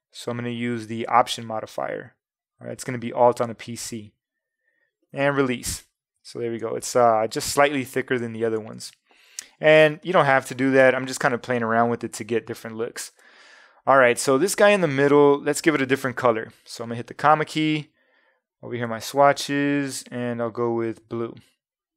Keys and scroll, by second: 6.6 super+0, 8.2 super+-, 10.0 space, 17.1 ,.